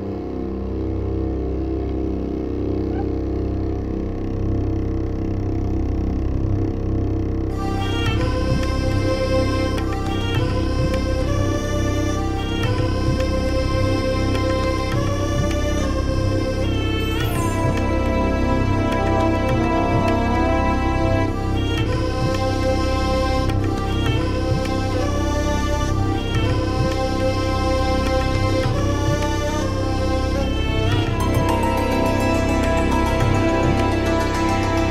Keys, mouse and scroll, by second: 2.0 click, 2.4-3.4 drag, 3.5-4.4 ctrl+scroll up 6, 5.2-6.3 drag, 7.2 click, 7.5-8.7 typing, 10.2 click, 17.2-17.7 ctrl+scroll up 4, 18.2-21.2 ctrl+scroll up 18, 21.7 ctrl+scroll up 2, 24.2 click, 24.5-26.1 typing, 26.7 click, 32.9-33.4 ctrl+scroll down 4, 33.6-34.9 ctrl+scroll down 5.